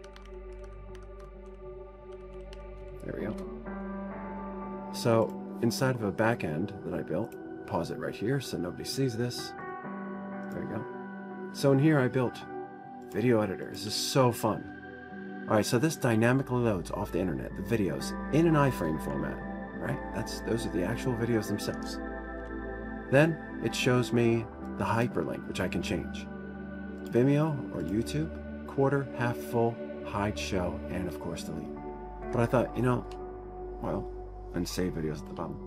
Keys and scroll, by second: 0.0-3.5 typing, 4.0 Return, 23.1 ctrl+0.